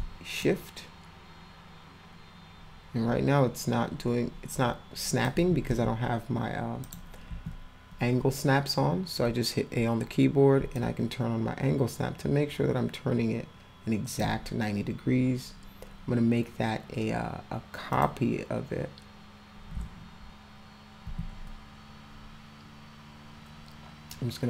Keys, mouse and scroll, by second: 0.4-5.2 shift+drag, 6.8 click, 7.3 a, 10.8-14.2 shift+drag, 17.9 click, 21.0 w.